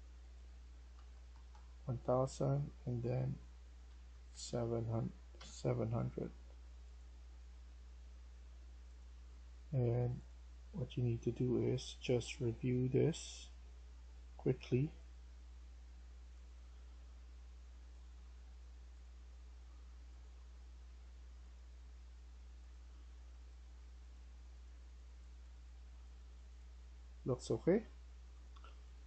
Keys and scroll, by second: 0.6-1.3 typing, 3.5-6.5 typing.